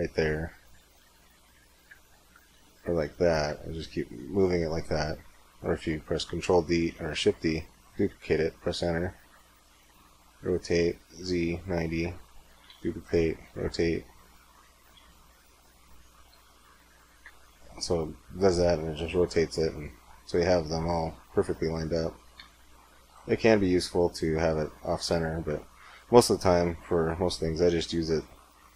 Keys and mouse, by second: 0.5 r, 2.2 r, 4.8 click, 6.5 shift+d, 6.9 middle click, 10.1 r, 12.5 shift+d, 13.2 r, 14.8 shift+d, 16.1 r, 22.2 x, 22.5 click, 23.2 x, 24.8 x.